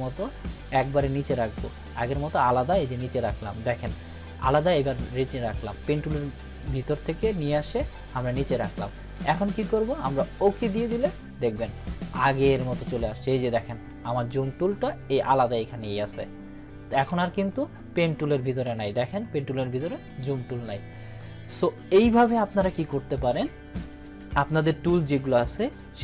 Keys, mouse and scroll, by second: 9.7-10.3 click, 18.0-19.0 drag, 22.0 click.